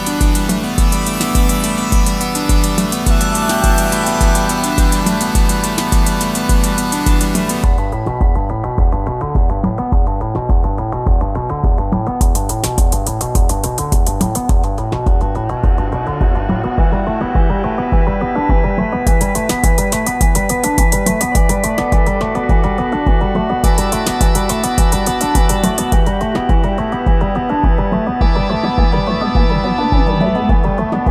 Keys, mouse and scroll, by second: 0.0 double click, 19.8-21.6 typing, 24.1 typing.